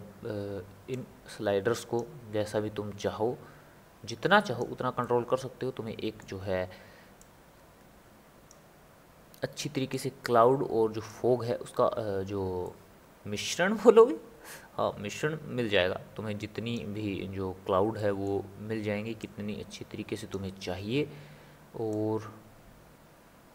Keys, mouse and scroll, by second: 0.9-5.0 drag, 5.0-7.2 middle drag, 7.2-12.6 drag, 12.6-15.2 middle drag, 15.2-18.0 drag, 18.0-19.2 middle drag, 19.2-23.5 drag.